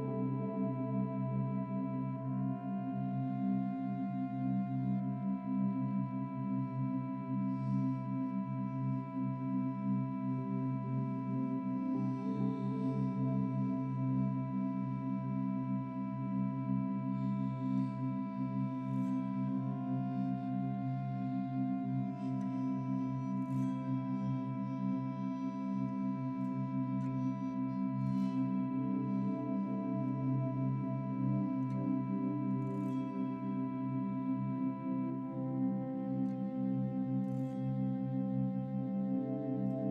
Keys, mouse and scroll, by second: 0.3-1.2 middle drag, 0.3 click, 1.2-1.7 scroll down 3, 1.7-3.0 middle drag, 3.0-3.4 drag, 3.4-3.7 scroll up 4, 3.7-4.5 shift+middle drag, 4.5 scroll up 1, 5.0 click, 7.7-8.2 drag, 9.0 s, 10.5 click, 13.2 shift+d, 14.4 click, 17.1 KP_0, 18.7 click, 19.7-21.2 middle drag, 21.8-22.3 shift+middle drag, 22.3-22.7 scroll up 4, 22.7 scroll down 1, 22.9-26.1 middle drag, 26.1 click, 28.9 click, 29.5 scroll down 1, 30.1-31.5 middle drag, 35.0 scroll down 2, 35.2-36.8 middle drag, 37.6 Tab, 37.8-38.2 scroll up 1, 38.2 middle click, 39.1 Tab, 39.4 click.